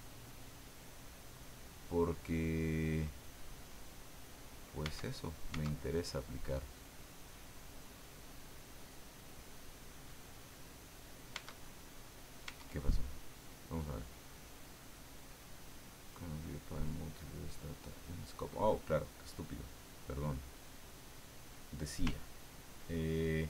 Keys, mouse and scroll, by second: 0.1 click, 0.8-3.0 drag, 4.1 right click, 4.8 Tab, 5.6 Tab, 9.7 click, 11.4 Tab, 12.5 Tab, 14.0 click, 19.5 click, 20.0 click.